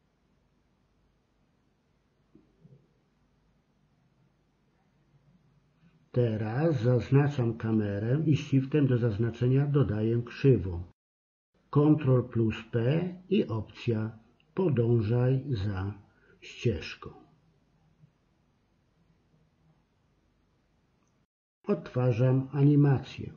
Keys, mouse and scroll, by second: 0.0 middle click, 3.4 KP_7, 4.0 a, 4.4 middle click, 6.8 click, 7.3-8.3 middle drag, 8.3 ctrl+t, 10.8 ctrl+p, 20.3-22.2 drag.